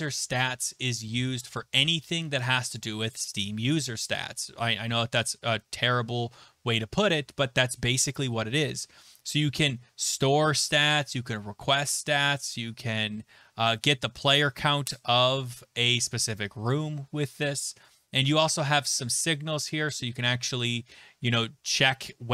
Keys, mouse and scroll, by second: 5.3-5.8 scroll, 5.9-10.9 scroll, 17.3-21.0 scroll.